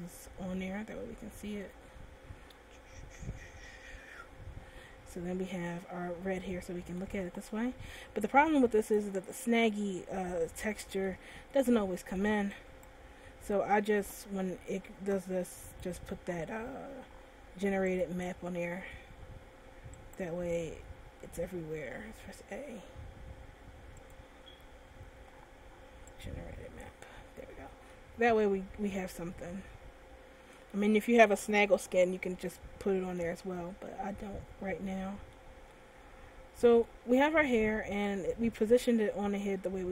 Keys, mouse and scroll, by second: 5.2 Tab, 5.9 middle click, 9.2 shift+click, 10.2-10.7 scroll down 2, 10.8 middle click, 11.8 shift+middle click, 13.1 right click, 14.1 Tab, 15.9 click, 19.6 Tab, 20.4 right click, 21.3 Tab, 22.0 a, 22.3 a, 24.3 click, 27.5 Tab, 28.2 middle click, 32.8 middle click, 33.8 scroll up 1, 34.5 scroll up 2, 35.1 middle click, 35.9 shift+middle click, 37.1 middle click.